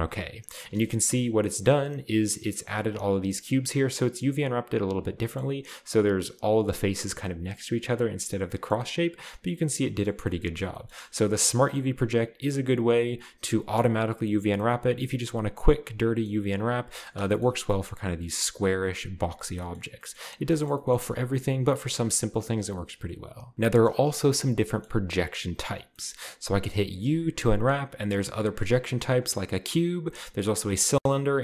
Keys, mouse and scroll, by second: 0.7-1.4 scroll up 1, 0.7-1.1 middle drag, 1.1 a, 1.3 a, 1.4-2.5 scroll down 1, 10.2-11.6 middle drag, 10.2-11.6 scroll down 2, 11.6 u, 14.6-17.2 middle drag, 16.4-17.2 scroll up 1, 17.2 shift+scroll up 1, 17.3-18.4 shift+middle drag, 19.5-20.5 scroll down 2, 19.6-21.9 middle drag, 24.9-25.5 middle drag, 27.1 u, 29.1 click, 29.6 u, 30.6 click, 31.0 u.